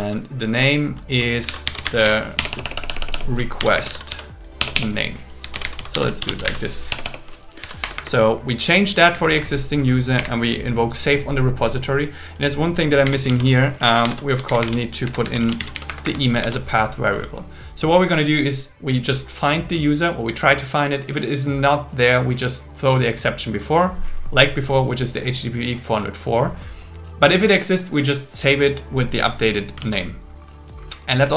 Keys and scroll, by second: 2.4 BackSpace, 3.6 shift+0, 3.8 space, 4.6 BackSpace, 6.9 BackSpace, 7.8 Escape, 9.1 Down, 10.2 Up, 12.8-14.0 typing, 14.5 alt+8, 14.6 alt+9, 15.1 Left, 15.9 Escape, 16.4 super+s, 29.9 super+s.